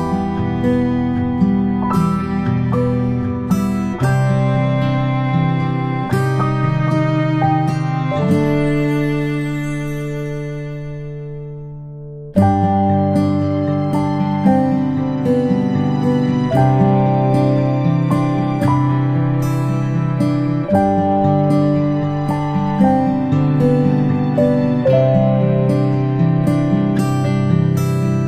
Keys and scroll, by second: 0.0-0.4 ctrl+shift+space, 14.9 ctrl+shift+[.